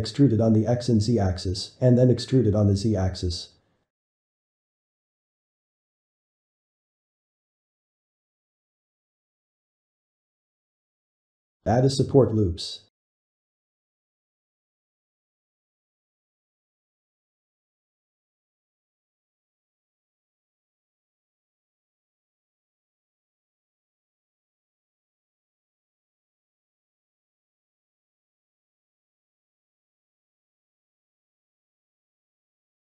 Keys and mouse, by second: 1.7-2.8 shift+middle drag, 2.8 `, 3.3 shift+middle click, 3.8 e, 5.7 g, 7.1-11.3 shift+middle drag, 11.3 ctrl+r, 16.3 shift+middle click, 16.6 click, 17.0 middle click, 17.6 ctrl+r, 21.5-24.5 middle drag, 25.0 shift+middle click, 25.8 g, 26.9-28.1 middle drag, 28.1 ctrl+r, 29.3-30.3 ctrl+shift+middle drag, 30.3 s.